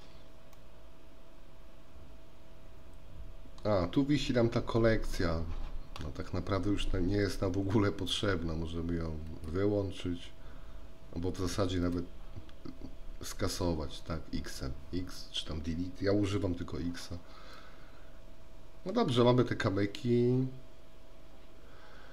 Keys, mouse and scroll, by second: 0.6-3.9 middle drag, 9.4 click, 12.0 click, 17.7-19.2 middle drag.